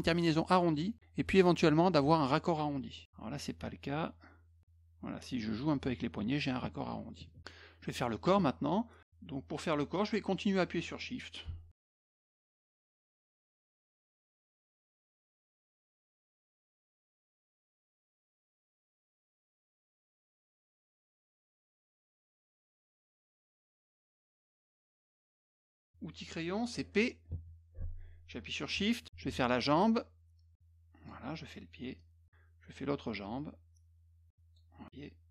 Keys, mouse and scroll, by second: 0.5 click, 3.0 click, 4.6-5.8 drag, 7.4 middle click, 7.8 middle click, 10.1 click, 12.3 shift+click, 14.1-15.3 shift+drag, 16.1 shift+click, 20.7 click, 22.7 click, 23.3 click, 24.1 click, 25.6 middle click, 27.4 p, 29.6-31.1 shift+drag, 32.0 shift+click, 33.2-34.6 shift+drag, 34.8 shift+click.